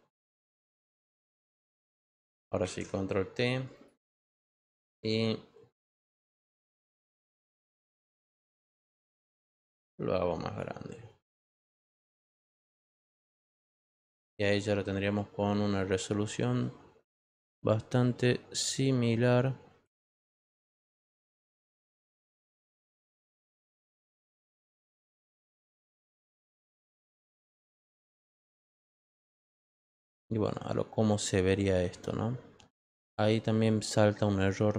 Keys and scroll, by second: 2.6 ctrl+t.